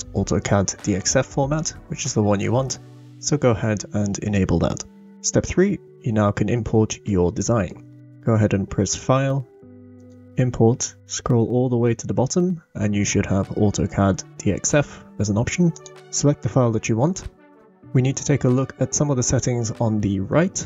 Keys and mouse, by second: 7.0-7.5 shift+drag, 7.5 shift+middle click, 8.0 middle drag, 8.9 click, 9.3-15.7 middle drag, 15.7 click.